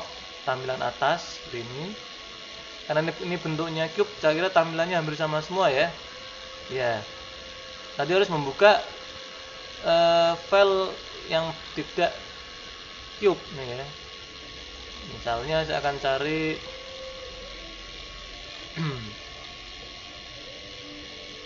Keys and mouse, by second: 14.5-16.3 drag.